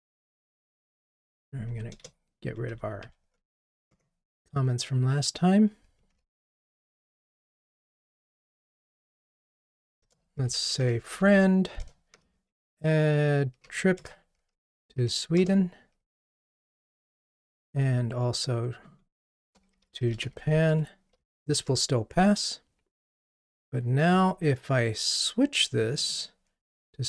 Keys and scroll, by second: 2.0 alt+Return, 2.6 alt+Up, 6.2 ctrl+r, 11.9 Return, 17.5 Return, 17.7 super+d, 20.6 super+d, 20.7 Escape.